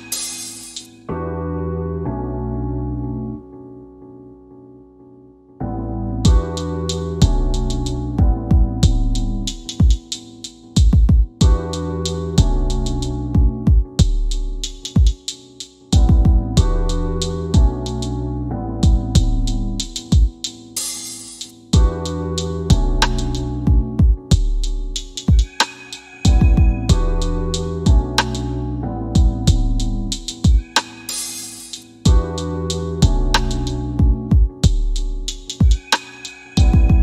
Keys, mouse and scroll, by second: 1.6 click, 7.6 scroll down 1, 8.5 click, 9.3 c, 22.5 scroll down 1, 23.8 click, 24.7 scroll up 1, 26.7-27.3 scroll down 1, 30.0 scroll down 1, 30.3 click, 33.6 click, 34.2 click, 35.6 f, 36.5 q.